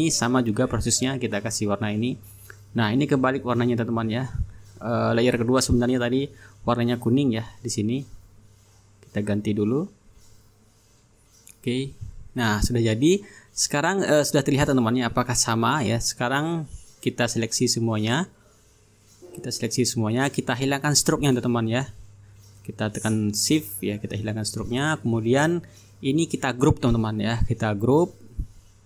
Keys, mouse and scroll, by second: 0.4-4.2 drag, 4.8-5.9 drag, 6.4 ctrl+z, 8.3-9.4 drag, 10.2 click, 10.6-12.4 drag, 12.6 click, 13.2-14.0 ctrl+scroll down 3, 14.0 ctrl+click, 14.4-14.9 ctrl+scroll down 2, 14.9-16.3 ctrl+drag, 16.3-17.0 ctrl+scroll up 4, 17.0-17.9 ctrl+scroll down 2, 17.9 click, 18.3-18.7 ctrl+scroll down 1, 18.7 ctrl+click, 19.3-20.0 ctrl+scroll up 1, 20.0-21.1 drag, 21.1-22.0 ctrl+scroll up 2, 22.0 scroll up 1, 23.5-24.7 shift+drag, 24.7-25.7 ctrl+scroll down 3, 25.7-26.1 ctrl+scroll down 1, 26.1-27.0 ctrl+scroll up 2, 27.0-27.8 ctrl+scroll down 3, 27.8-28.8 drag.